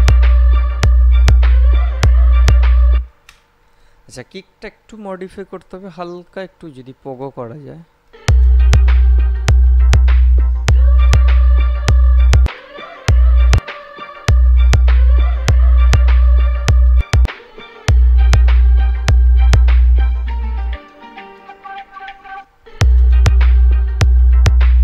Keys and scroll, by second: 3.2 space, 8.3 space, 22.6 space.